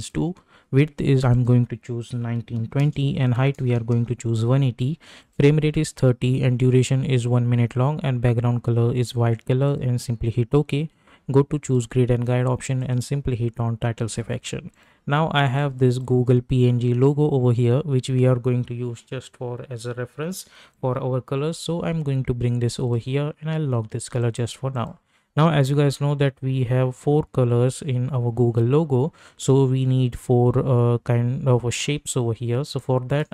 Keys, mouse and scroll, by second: 0.0-0.5 typing, 1.3 click, 9.7-20.7 drag, 20.7-24.2 drag, 32.7 click.